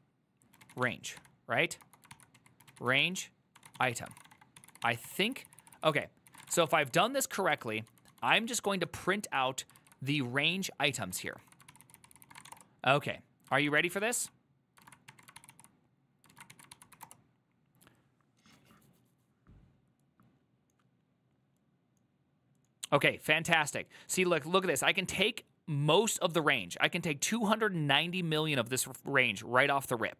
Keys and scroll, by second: 0.0-9.9 typing, 9.9 ctrl+u, 11.2 ctrl+d, 11.4 ctrl+d, 11.8 ctrl+c, 11.9 ctrl+c, 12.1 ctrl+c, 12.2-13.9 typing, 13.6 ctrl+a, 14.3 ctrl+c, 14.9 ctrl+a, 15.2 1, 15.5 ctrl+c, 16.4 ctrl+a, 16.6 2, 16.8 ctrl+c, 17.0 Up, 17.1 Return.